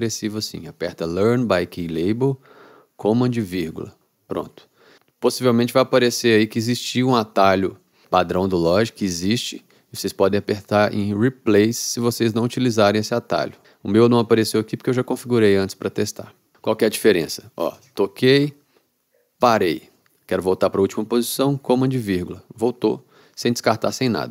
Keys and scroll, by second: 3.5 super+,, 17.8 space, 19.4 space, 22.0 super+,.